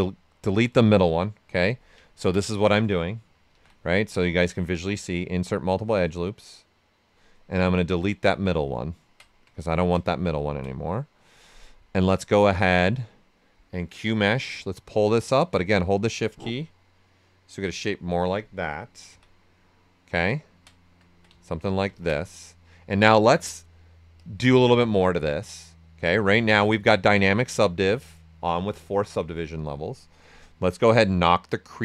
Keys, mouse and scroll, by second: 1.6 click, 2.0 ctrl+right click, 3.5 ctrl+z, 5.4-7.9 drag, 8.8 ctrl+right click, 9.6 ctrl+right click, 14.6-17.9 drag, 19.1 d, 20.4 ctrl+right click, 21.0 ctrl+alt+right click, 21.9-30.4 ctrl+drag, 30.4-31.8 drag.